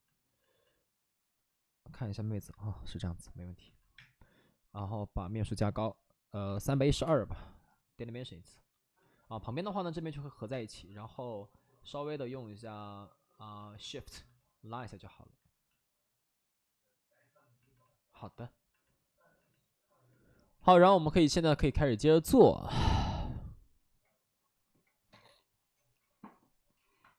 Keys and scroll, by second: 3.5 alt+s, 3.9 space, 6.3 3, 6.6 1, 6.8 2, 6.9 Return, 10.4 space, 12.6 space, 13.5 alt+s.